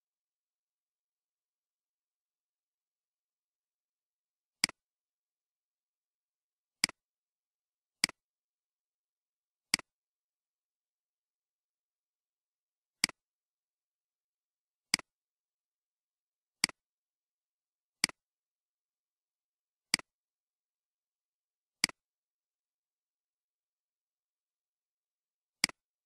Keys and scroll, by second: 5.4 Delete, 8.6 Delete.